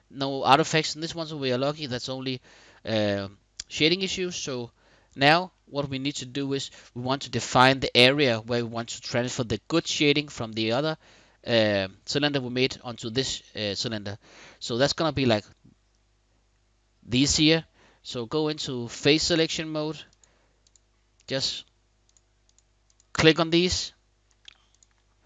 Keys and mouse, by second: 3.5-3.8 middle drag, 4.2 Tab, 5.2-7.7 middle drag, 18.1 click, 20.3 shift+click, 21.7 shift+click, 22.1 shift+click, 23.3 middle click, 24.3 shift+click.